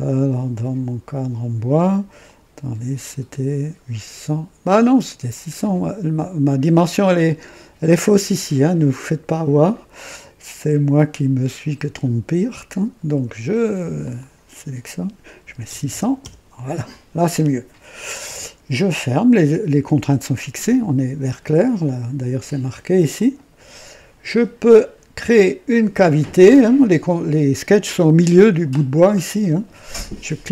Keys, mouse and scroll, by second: 2.2 click, 10.6 click, 13.9 click, 15.3 KP_6, 15.6 KP_0, 15.8 KP_0, 16.1 KP_Enter, 23.1 click.